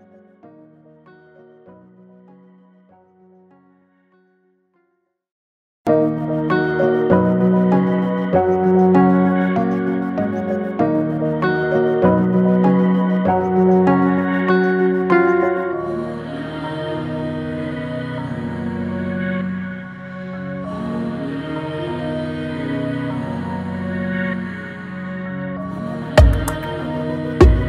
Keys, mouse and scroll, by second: 1.4 click, 1.6-2.3 typing, 4.0-4.7 typing, 4.1 click, 8.1-13.9 drag, 14.2 click, 17.8 shift+click, 19.5-20.3 typing, 26.8-27.5 typing.